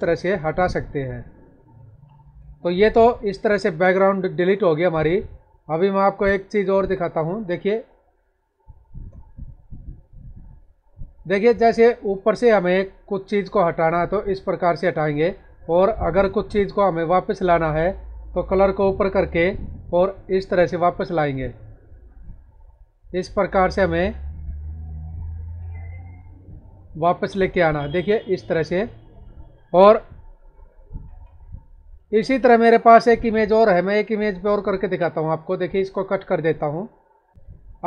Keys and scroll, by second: 1.5 ctrl+-, 5.7 ctrl+=, 7.4 space, 21.9 space, 30.3 ctrl+-.